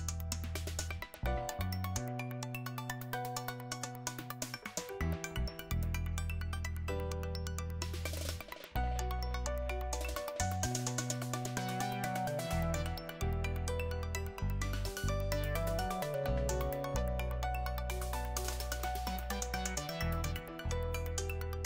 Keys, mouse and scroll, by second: 1.6 Right, 2.3 Return, 6.1-7.0 typing, 9.4-12.3 typing, 11.4 Return, 14.8 click, 15.7-18.0 scroll down 1, 18.3-20.0 drag, 20.0-21.6 scroll up 1.